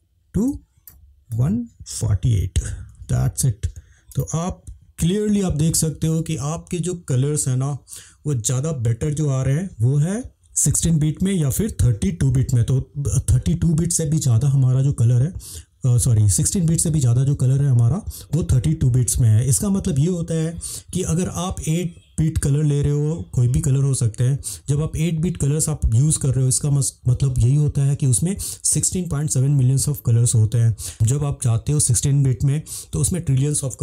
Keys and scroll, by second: 1.3 1, 1.9 4, 2.9 8.